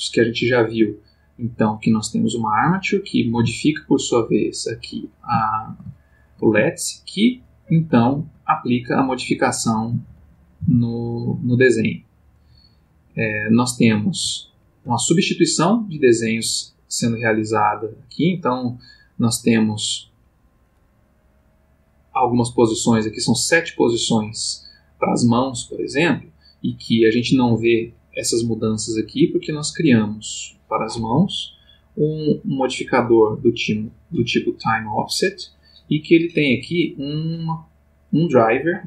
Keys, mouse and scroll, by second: 0.4 click, 0.9-1.7 ctrl+middle drag, 2.7 click, 3.3 g, 4.9 Escape, 5.4-6.6 ctrl+middle drag, 6.7 ctrl+shift+middle click, 8.1 ctrl+middle click, 8.9 click, 10.6 r, 12.9 click, 13.8 click, 14.5-15.0 ctrl+middle drag, 15.3 click, 18.4-20.8 drag, 22.5 click, 23.6 click, 26.8-29.8 drag, 31.5 click.